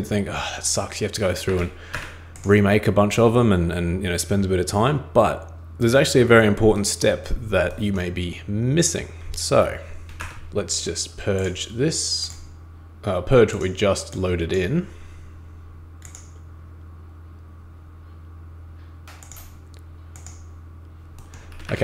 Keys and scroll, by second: 1.5 super+Escape, 1.9 super+Escape, 10.2 super+Escape, 21.5 super+Escape.